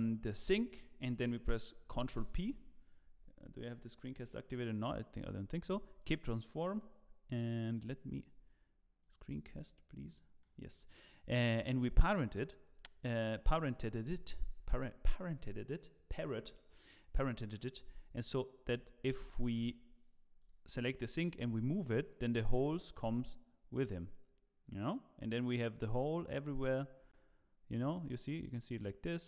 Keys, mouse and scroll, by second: 10.0 middle click, 10.7 middle click, 12.0 click, 12.7-13.3 scroll down 2, 13.1 click, 17.8 h, 19.5 h, 19.9 click, 21.4 click, 21.4 g.